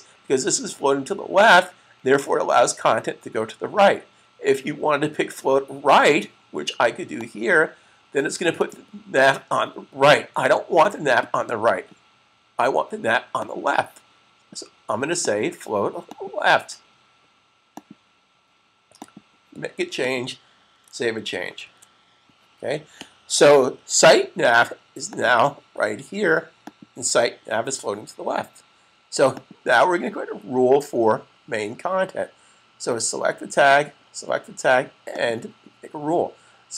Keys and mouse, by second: 5.9 click, 10.6 click, 13.2 click, 21.3 super+s, 24.9 click, 29.1 click, 33.7 click.